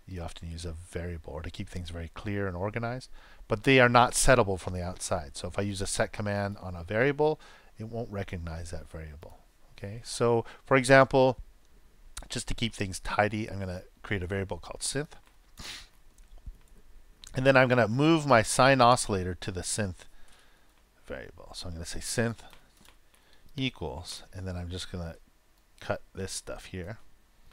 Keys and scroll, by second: 27.4 super+x.